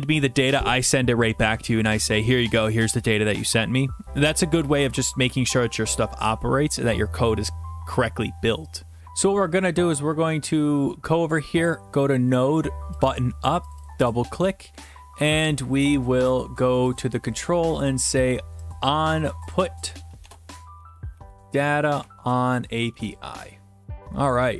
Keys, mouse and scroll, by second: 11.7 click, 13.1 click, 13.7 click, 13.8 click, 17.0 click, 17.9 click, 19.5 click, 20.2-22.9 typing, 20.2 click.